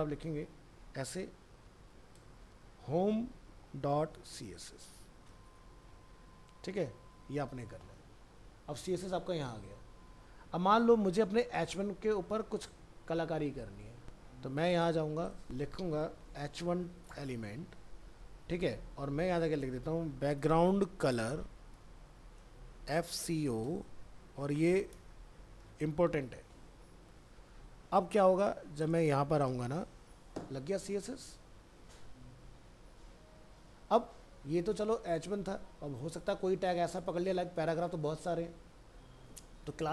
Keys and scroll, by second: 7.2 ctrl+s, 25.6 ctrl+s.